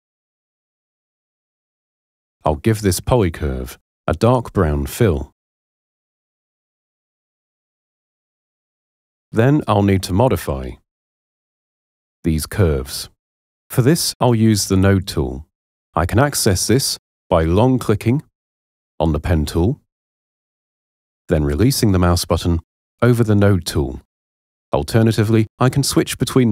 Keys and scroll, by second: 24.9 p.